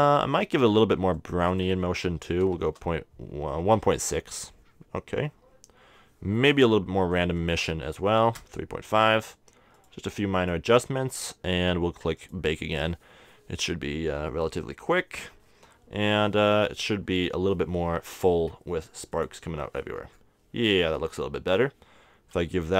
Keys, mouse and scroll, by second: 8.8-17.8 drag, 19.2-20.8 drag.